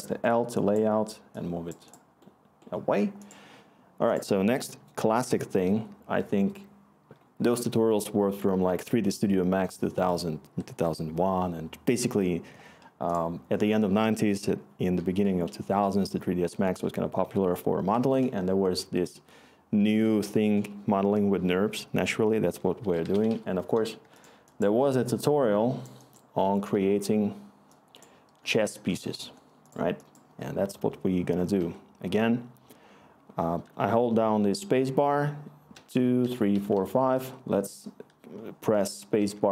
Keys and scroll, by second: 10.4 Tab, 14.1 Tab, 22.5-23.8 typing, 23.9 Return, 31.5 3, 35.5-37.7 typing, 39.1 3.